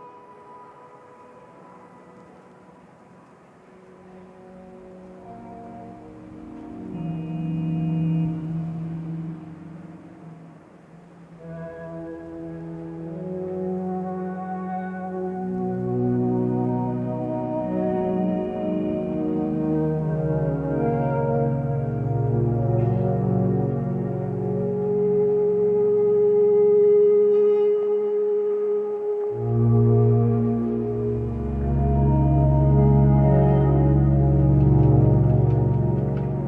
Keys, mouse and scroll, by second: 17.7 ctrl+z, 18.7 ctrl+t.